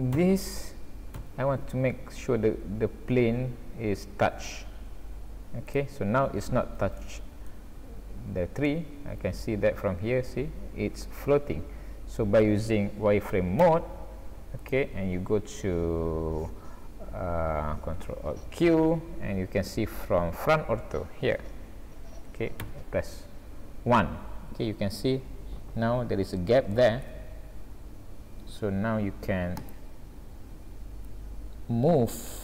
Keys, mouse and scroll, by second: 0.2 g, 7.0 shift+middle click, 7.7-8.4 scroll up 4, 8.7 middle click, 13.6 z, 18.5 ctrl+alt+q, 21.2 ctrl+alt+q, 22.6 KP_1, 24.5 scroll up 2, 25.0 scroll down 1, 25.4 scroll up 2, 26.7 shift+middle click, 29.6 click, 31.1 click.